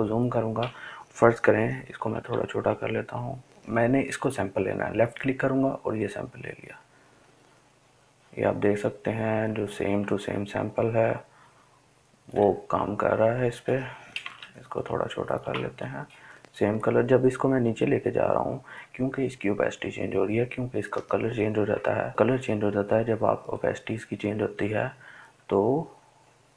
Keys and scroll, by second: 3.6-4.8 typing.